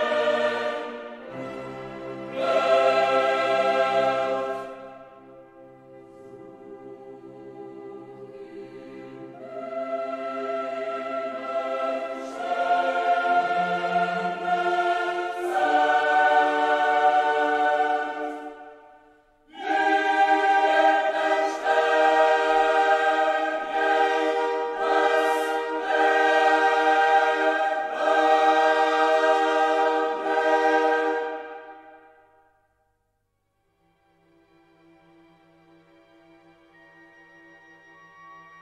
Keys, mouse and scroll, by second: 1.9 click, 7.7 click, 8.5-10.1 drag, 10.7 middle click, 12.1 click, 17.1 click, 20.0 click, 21.6 0, 22.5 click, 23.6 0, 24.3 click, 25.2 right click, 27.1 click, 29.3 click, 33.1-33.5 scroll down 1, 34.5-35.1 scroll down 2, 36.6 click.